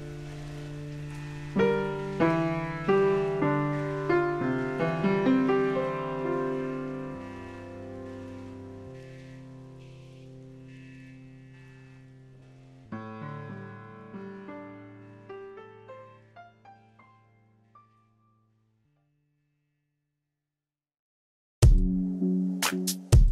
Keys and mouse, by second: 1.9 click, 3.0 ctrl+shift+x, 3.4 right click, 3.9 click, 5.1 ctrl+x, 6.8 click, 9.5 click, 11.8 click, 12.9 click, 15.5 click, 18.4 s, 18.8 click.